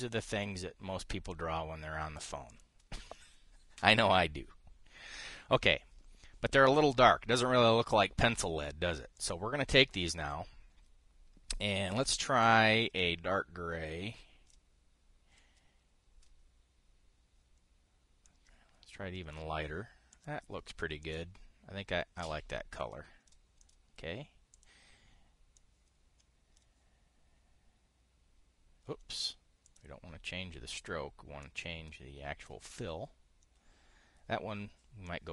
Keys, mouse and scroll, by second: 0.0 click, 2.0 click, 3.2 click, 9.9 click, 13.1-15.3 drag, 18.9-20.1 drag, 20.8 click, 21.7 click, 22.9-24.1 drag, 24.3 drag, 25.2 click, 26.2-27.4 drag, 30.4 click, 32.1-33.3 drag.